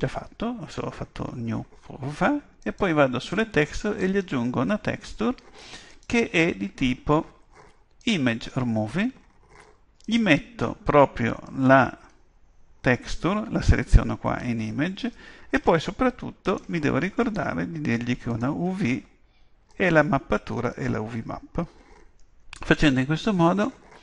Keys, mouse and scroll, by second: 2.6-7.7 drag, 10.0-11.9 drag, 15.1-17.0 drag, 17.2-19.0 drag, 19.7-21.4 drag.